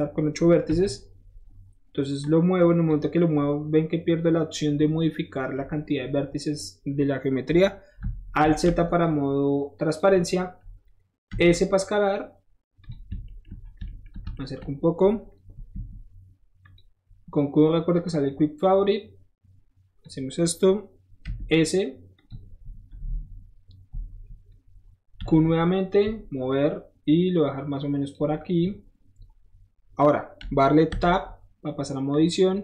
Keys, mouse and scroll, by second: 0.8 KP_1, 1.5 middle click, 1.5 scroll up 1, 2.2-2.9 drag, 6.1 middle click, 6.5 middle click, 6.9 middle click, 8.4 alt+z, 9.0-10.0 drag, 11.4 s, 12.8 click, 13.3 shift+middle drag, 13.6-14.1 shift+middle drag, 14.2 shift+middle click, 15.7 q, 16.6 click, 18.0-20.0 drag, 21.3 s, 22.2 click, 25.9 click, 26.5-28.1 drag, 28.3 middle drag, 28.6 middle click, 28.9-29.3 scroll down 2, 31.0 Tab, 32.1 click.